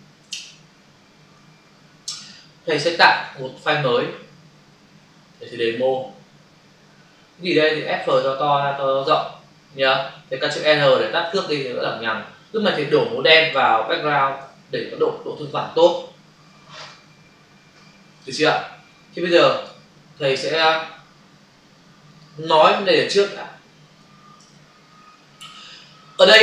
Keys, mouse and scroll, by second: 0.3 alt+Tab, 3.2 ctrl+n, 5.3 click, 11.0 ctrl+r, 14.3 alt+BackSpace, 19.6 f, 22.0 click, 24.4 ctrl+r.